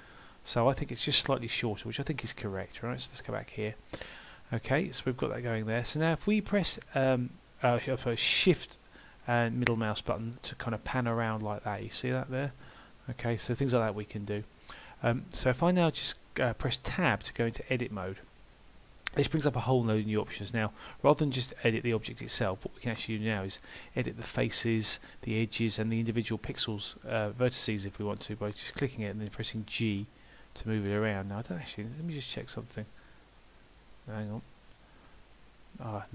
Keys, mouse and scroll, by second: 4.6 middle click, 5.7-6.8 scroll up 1, 6.9 shift+middle click, 13.7 shift+middle click, 14.6 scroll up 1, 16.9 Tab, 26.0 click, 26.8 middle click, 29.3 g, 32.4 click, 35.2 right click.